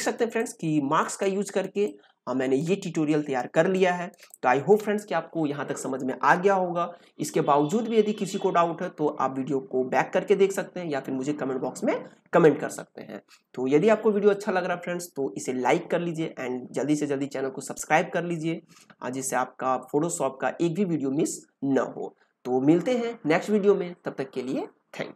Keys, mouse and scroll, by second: 0.1 ctrl+space, 0.3-3.7 ctrl+drag, 3.7-7.0 ctrl+drag.